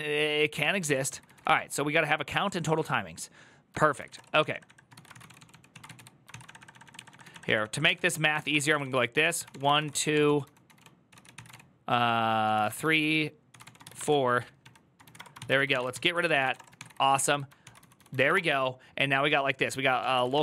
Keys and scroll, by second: 0.4-20.4 typing, 0.6 ctrl+c.